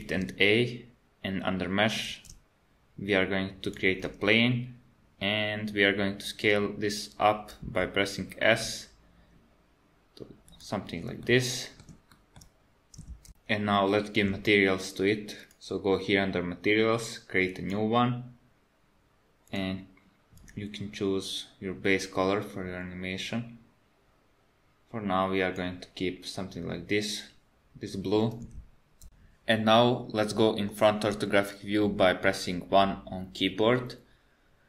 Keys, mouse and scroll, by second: 0.0 shift+a, 2.1 shift+a, 7.7 s, 11.3 middle click, 12.2 shift+middle click, 15.5 click, 17.5 click, 19.5 click, 30.7 KP_1.